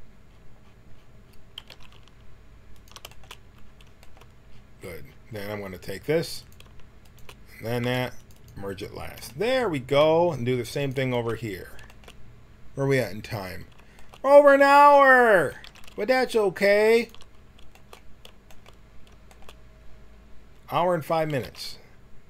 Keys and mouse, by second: 1.5 g, 6.3-7.8 right drag, 7.8 w, 8.6-10.2 drag, 10.7-15.5 drag, 15.5 g, 15.6 middle click, 21.2 g.